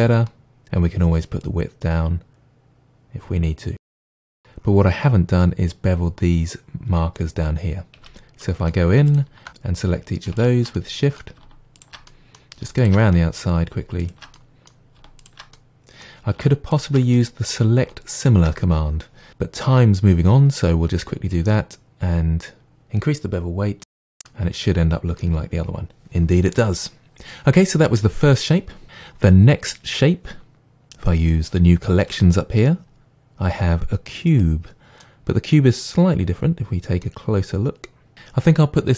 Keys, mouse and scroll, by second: 3.7 click, 3.8-9.1 middle drag, 8.0 Tab, 9.1 alt+click, 10.4 shift+click, 10.8-11.8 middle drag, 11.8 shift+click, 12.1-12.8 middle drag, 12.8 shift+click, 13.2-14.0 middle drag, 14.0 shift+click, 14.4-15.2 middle drag, 15.2 shift+click, 15.6-16.7 middle drag, 16.7 shift+click, 17.2-18.2 middle drag, 18.2 shift+click, 21.3-24.3 drag, 23.9 Tab, 24.3-32.2 middle drag, 32.2 click, 34.3 click, 35.0-38.1 middle drag, 36.2-37.0 scroll up 2, 38.1 click.